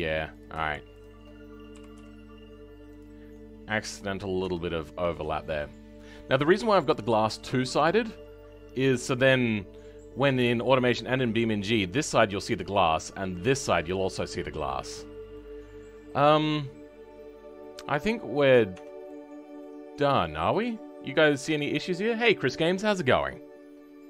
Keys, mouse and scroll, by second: 0.4 click, 1.8 g, 3.3 middle click, 4.2 scroll up 1, 4.4 Tab, 4.6-5.0 scroll down 7, 5.2-5.6 scroll down 2, 5.6-7.0 middle drag, 7.0-8.2 scroll up 4, 8.2-8.9 scroll down 2, 8.9-10.7 middle drag, 10.7-11.1 scroll up 3, 11.1-14.8 middle drag, 14.8 Tab, 15.3-18.7 middle drag, 18.7 Tab, 19.0-24.0 right drag.